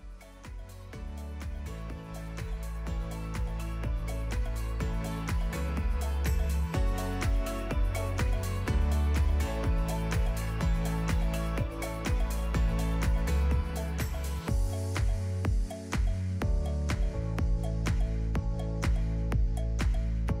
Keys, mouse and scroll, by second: 0.0-1.4 typing, 0.2 Tab, 1.0 click, 1.7 click, 1.8 ctrl+b, 3.3 right click, 3.5 Tab, 3.8 shift+a, 4.3 middle click, 4.6 alt+g, 4.7 alt+r, 5.0 middle click, 5.3-7.5 typing, 6.8 click, 7.2 ctrl+a, 7.7-8.0 scroll down 3, 8.0 click, 8.1 click, 8.7-11.1 typing, 10.3 click, 11.0 click, 11.4 Tab, 11.8 scroll up 8, 12.0 click, 12.2 click, 12.3 click, 12.5 click, 12.8 KP_0, 12.9 KP_0, 13.0-13.4 scroll down 4, 13.4 g, 13.7 g, 14.6 click, 15.8 Tab, 15.9 click, 16.1 g, 16.5 click, 17.0 Tab, 17.4 click, 17.5-20.4 typing, 17.8 click, 19.5 click, 20.0 middle click.